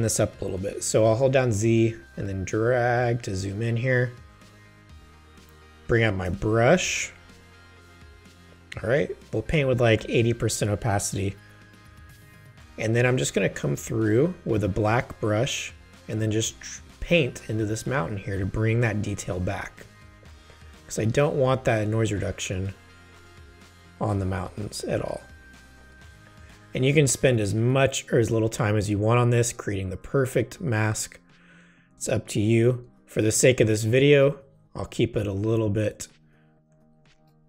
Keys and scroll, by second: 1.5 z, 4.5 space, 6.3 b, 7.2 ctrl+alt+b, 10.0 8, 24.0 space, 26.5 space, 32.7 space.